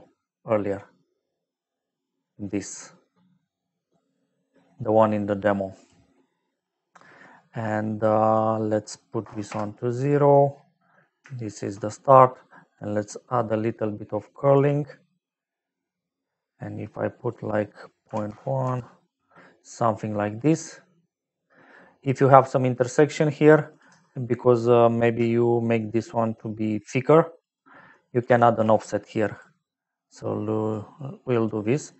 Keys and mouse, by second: 0.7 click, 8.2 click, 9.2 KP_0, 9.4 Return, 11.8 middle click, 13.0 click, 17.2 click, 18.0 KP_Decimal, 18.2 KP_1, 18.6 Return, 20.7 middle click, 22.9 click, 23.7 click, 25.7 shift+click, 28.1 click, 28.3 shift+a, 29.3 click, 30.6 click, 31.3 click, 31.8 click.